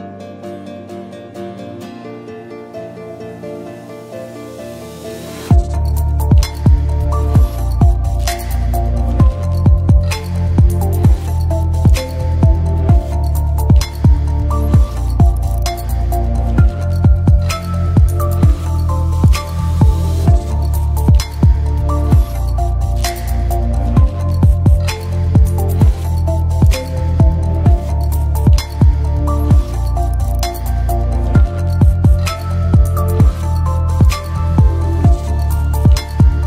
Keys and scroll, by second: 3.8-4.7 typing, 6.7-8.1 typing, 11.4-12.2 typing, 16.7 a, 16.7 space, 19.9-20.9 typing, 23.7-24.6 typing, 32.8 Delete, 36.1 space.